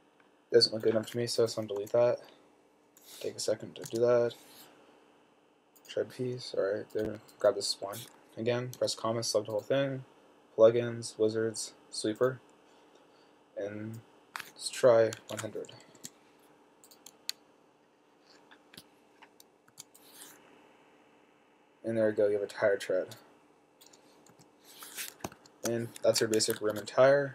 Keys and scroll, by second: 4.2 6, 9.0 ,, 15.6-16.2 typing, 20.0 t, 24.6 7, 26.4 Escape, 26.5 Escape, 27.1 super+s.